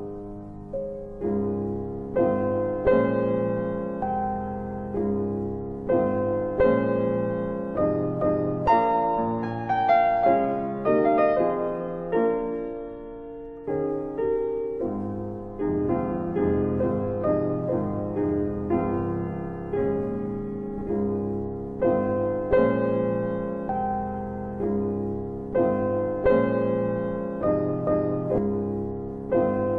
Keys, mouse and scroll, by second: 0.8 ctrl+z, 1.7 alt+click, 1.9 alt+click, 2.3 alt+middle click, 2.8 alt+middle click, 2.9 alt+right click, 2.9 alt+right click, 3.2 alt+click, 5.3 alt+click, 5.3 alt+middle click, 5.5 alt+middle click, 5.9 alt+click, 6.1 alt+click, 9.8 click, 10.8 click, 12.3 alt+click, 14.5 alt+click, 15.4 alt+click, 16.0 alt+click, 18.2 alt+click, 18.6 alt+click, 20.2 click, 21.5 alt+click, 23.1 alt+click, 23.5 alt+middle click, 23.6 alt+middle click, 24.0 alt+click, 24.1 alt+click, 27.3 alt+click, 27.5 alt+click, 27.7 alt+right click, 28.8 alt+middle click, 29.5 alt+click.